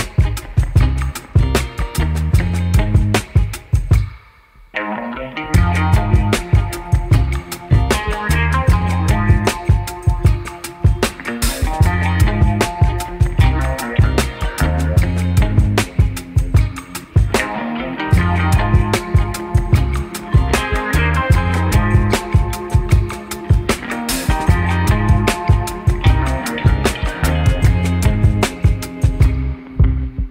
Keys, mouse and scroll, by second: 0.6 KP_0, 7.5-7.8 middle drag, 8.3 click, 8.4 middle click, 8.5 click, 8.6 middle click, 8.7 click, 10.3 click, 12.1 click, 15.2 middle click, 18.1 click, 20.2 m, 22.1 m, 22.9 click, 23.5 m, 25.2 m, 27.7 middle click.